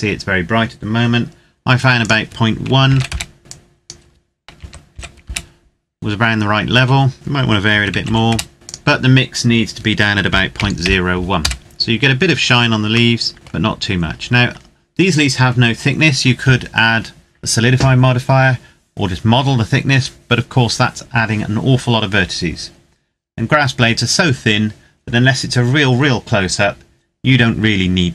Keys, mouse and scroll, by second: 2.0 click, 2.9 KP_1, 3.1 KP_Enter, 3.5 click, 4.3 KP_Decimal, 4.9 KP_1, 5.3 KP_Enter, 7.1 click, 7.5 KP_Decimal, 7.9 KP_1, 8.0 KP_5, 8.3 KP_Enter, 8.7 click, 10.3 KP_Decimal, 10.5 KP_0, 10.7 KP_1, 11.3 KP_Enter, 11.8-13.1 scroll down 1, 13.1 middle click.